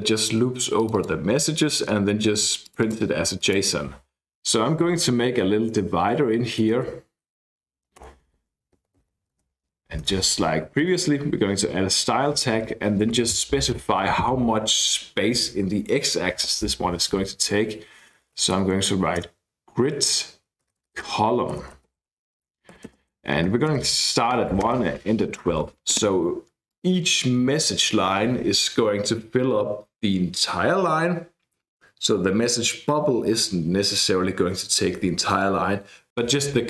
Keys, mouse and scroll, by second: 0.7 click, 2.6-3.8 drag, 4.4 <, 6.4-7.5 typing, 8.2 Return, 8.5 Up, 8.8 Right, 9.0 Right, 9.2-10.2 typing, 17.9-19.0 typing, 19.2 Return, 20.6-24.9 typing, 26.7 click.